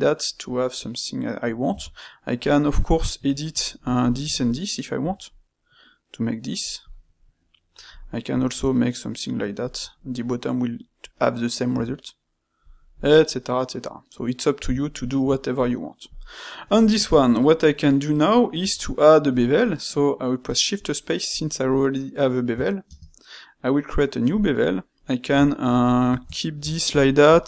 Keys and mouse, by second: 1.6 Tab, 2.5 middle click, 3.4 click, 4.0 shift+click, 5.0 g, 7.4 middle click, 7.9 click, 8.3 g, 9.8-11.6 middle drag, 11.6 g, 12.8-14.6 middle drag, 14.6 Tab, 15.0-16.0 shift+middle drag, 16.0 click, 16.8-18.5 ctrl+shift+middle drag, 18.5 space, 25.4-27.4 ctrl+middle drag.